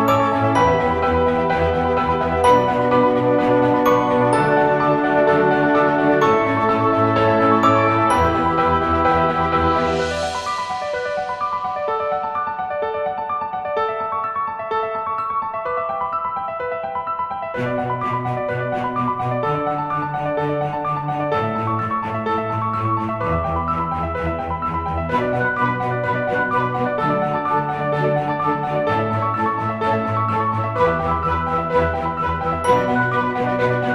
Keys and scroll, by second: 0.3 Delete, 7.1-11.1 typing, 9.3 ctrl+z, 9.9 ctrl+z, 12.4-17.1 typing, 21.1-31.8 typing, 32.9-33.9 typing.